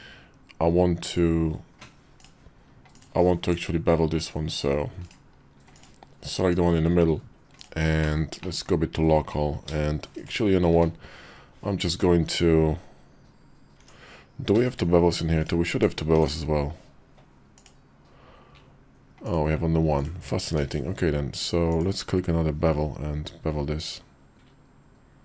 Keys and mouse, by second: 2.7 click, 3.6 Tab, 3.9 click, 4.8 right click, 5.5 click, 6.2 Tab, 7.4 Tab, 7.8 /, 8.2 middle click, 9.4 ctrl+b, 10.5 q, 13.5 Tab, 14.6 ctrl+`, 15.5 Tab, 16.0 ctrl+`, 19.7 click, 20.2 q.